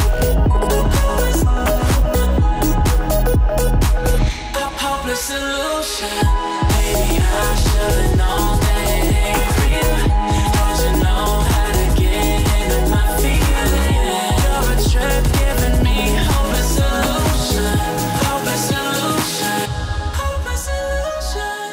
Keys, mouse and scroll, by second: 0.2 Up, 1.2 click, 2.0 click, 2.1 click, 4.4-4.8 alt+scroll down 1, 5.6 alt+scroll up 1, 6.1 click, 7.7 alt+scroll up 1, 8.7 click, 10.2 alt+scroll down 1, 13.6 click, 17.3 click, 19.0 Up.